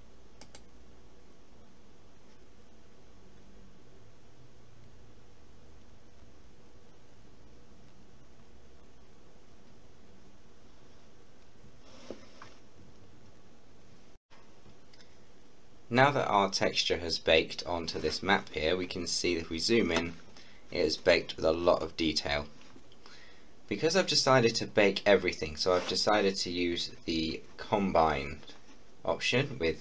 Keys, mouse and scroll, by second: 0.4 click, 14.2 F12, 18.9 scroll up 1, 21.4-21.8 scroll down 1.